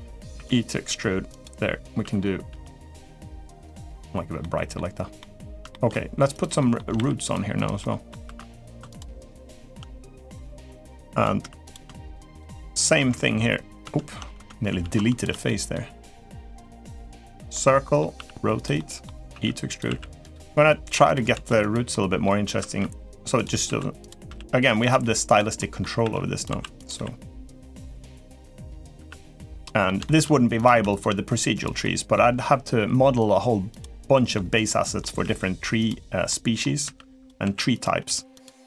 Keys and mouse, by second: 0.1 e, 2.2 g, 4.2 middle click, 4.9 middle click, 5.5 shift+middle click, 6.3 middle click, 6.8 ctrl+r, 7.6 middle click, 8.0 3, 8.4 click, 8.7 shift+click, 8.9 shift+click, 9.4 shift+click, 9.7 middle click, 10.6 click, 11.2 3, 11.4 click, 12.1 shift+click, 12.3 shift+click, 13.0 ctrl+x, 13.6 ctrl+z, 14.6 ctrl+z, 15.2 middle click, 16.3 click, 16.6 middle click, 17.3 middle click, 17.9 r, 18.5 middle click, 19.1 e, 19.6 s, 20.3 g, 21.1 s, 21.7 middle click, 22.5 e, 24.0 s, 24.0 r, 24.7 g, 25.3 middle click, 25.8 e, 26.2 s, 26.7 r, 27.7 g, 28.4 middle click, 29.3 r, 29.4 middle click, 29.8 shift+middle click, 30.3 click, 30.7 shift+click, 31.0 shift+click, 31.6 middle click, 33.5 click, 34.1 middle click, 34.9 r, 36.0 middle click, 36.6-38.6 typing.